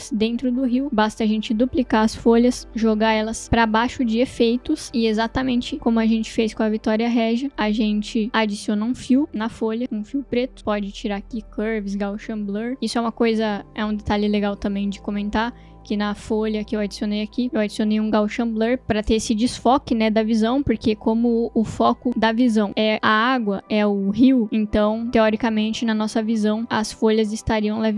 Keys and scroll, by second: 0.8 ctrl+d, 9.6-10.4 typing, 11.0 Return.